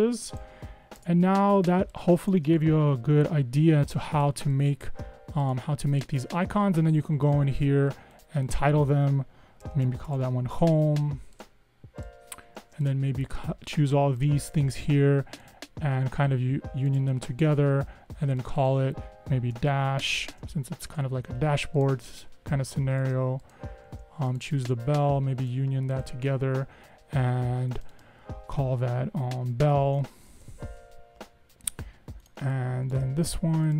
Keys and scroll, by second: 1.1 BackSpace, 9.6-10.8 typing, 19.4-20.9 typing, 20.9 Return, 29.7-31.0 typing, 31.2 Return.